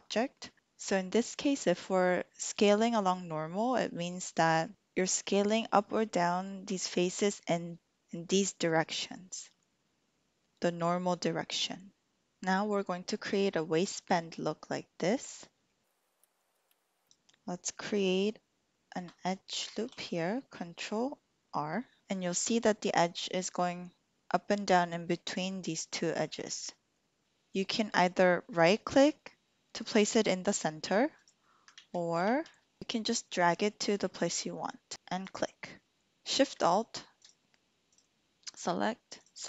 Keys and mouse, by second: 4.2 middle click, 4.7 middle click, 15.7 shift+click, 16.1 shift+click, 16.6 shift+click, 19.5 ctrl+r, 31.8 ctrl+z, 32.2 ctrl+z, 35.2 click, 37.1 alt+shift+click.